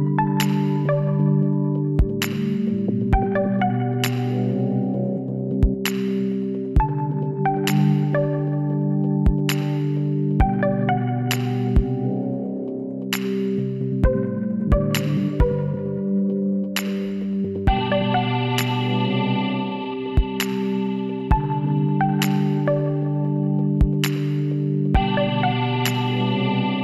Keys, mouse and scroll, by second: 0.3 g, 1.9 middle click, 3.7-5.4 drag, 5.8 s, 9.5 s, 12.1-14.0 drag, 13.4 s, 15.1-16.3 middle drag, 16.3-18.1 drag, 18.7 s, 24.2-25.6 middle drag, 25.6-26.8 right drag.